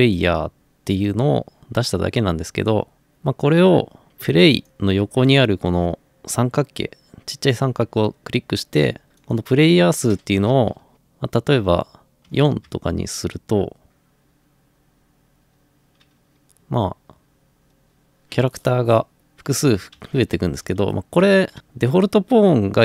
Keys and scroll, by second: 12.3 4, 12.6 Return, 19.3-21.6 typing.